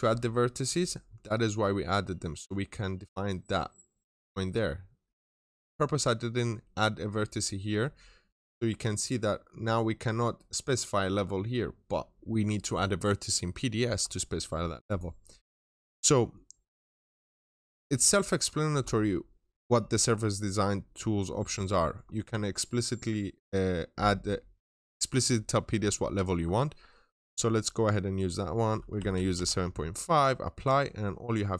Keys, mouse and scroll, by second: 9.4-10.7 scroll up 1, 10.7-11.7 scroll down 1, 14.7 right click, 16.5 click, 28.8-30.4 typing, 30.4 middle click, 30.8-31.2 scroll up 1, 31.4 click.